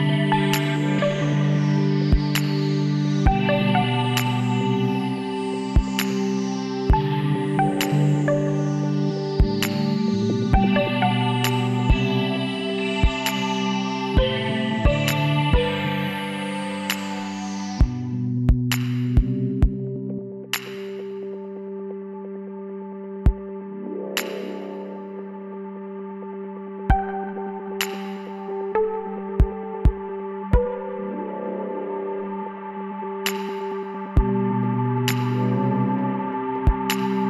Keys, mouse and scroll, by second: 0.6-2.1 right drag, 1.4 x, 5.4-7.3 drag, 7.3-11.5 middle drag, 11.5-13.3 drag, 13.3 middle click, 14.5-18.5 right drag, 19.2 ctrl+e, 24.4-26.8 middle drag, 26.8 KP_1, 28.1-29.7 middle drag, 33.7-36.2 middle drag.